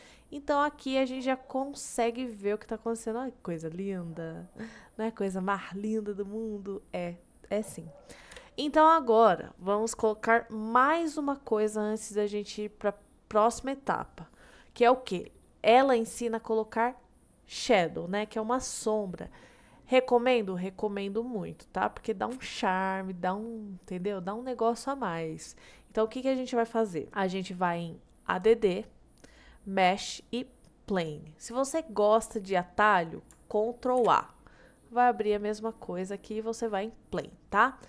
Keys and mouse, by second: 2.0 click, 2.3-3.6 middle drag, 3.9 middle click, 4.6-6.9 middle drag, 8.4 KP_1, 28.4-31.1 drag, 32.4 middle drag, 34.0 shift+a, 37.2 click.